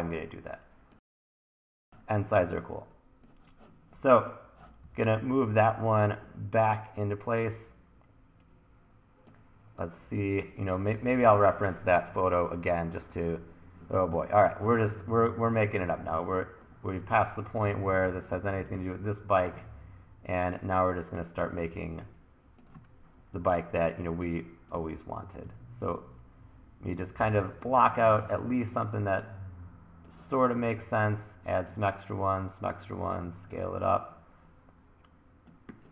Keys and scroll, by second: 1.8 t, 4.8 e, 5.3 w, 14.0 1, 19.6 w, 21.8 r, 22.3 r, 24.8 w, 25.4 e, 30.6 e, 33.3 t.